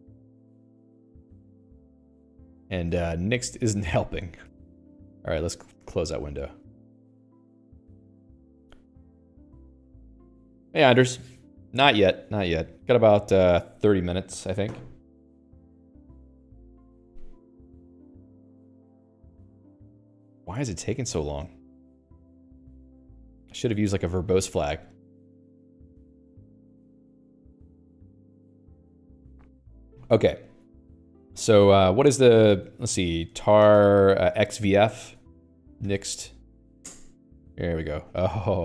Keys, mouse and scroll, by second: 2.9 q, 7.0 q, 8.5 click, 8.6 Escape, 19.0-22.5 scroll down 3, 31.3 Escape, 32.9 Escape, 33.1-36.7 typing, 37.3 Return.